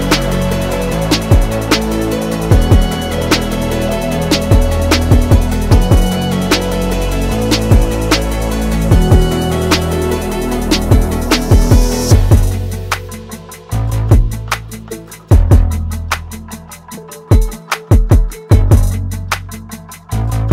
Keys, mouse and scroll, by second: 2.1 click, 4.2 click, 6.9 click, 9.5 ctrl+shift+[, 10.2 ctrl+shift+], 11.6 Down, 12.5 Right, 13.7 Down, 14.0 Left, 14.4 Down, 14.8 Right, 15.3 Left, 17.7-19.8 drag, 20.1-20.5 drag.